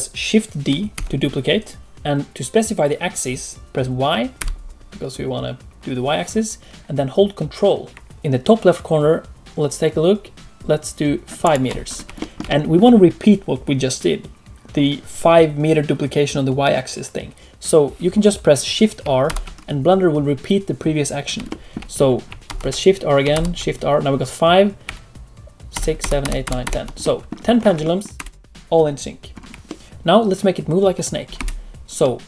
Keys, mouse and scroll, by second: 0.9 shift+d, 11.8 scroll down 2, 12.1 shift+middle click, 19.2 shift+r, 21.4 shift+middle click, 22.4 shift+r, 23.3 shift+r, 25.7-26.6 typing, 27.0 middle click, 27.5 scroll up 3, 27.8 shift+middle click, 28.1 space, 29.3-29.6 scroll down 2, 29.6 shift+middle click, 29.7 click, 29.7 space, 31.3 space, 32.0 middle click.